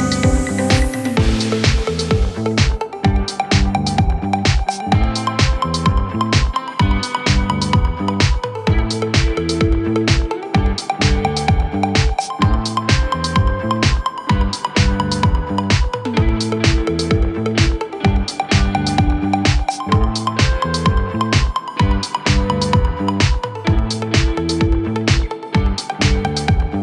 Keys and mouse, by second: 2.0 KP_1, 2.4 KP_3, 3.4 Tab, 6.2-10.3 middle drag, 6.5 Tab, 10.3-11.7 drag, 11.7 shift+middle click, 11.9 shift+d, 12.5-13.5 drag, 13.5-22.0 shift+middle drag, 14.3 KP_1, 14.4 KP_3, 15.3 r, 18.1 KP_7, 19.6 r, 20.5 g, 22.0-23.1 drag, 23.1-24.2 middle drag, 24.2-26.8 drag.